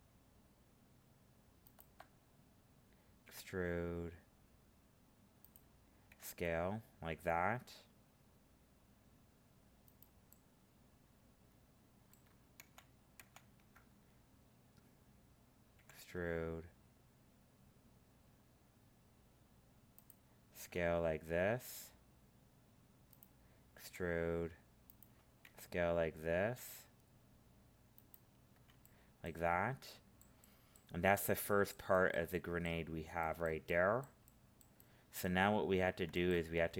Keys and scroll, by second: 12.5 ctrl+z.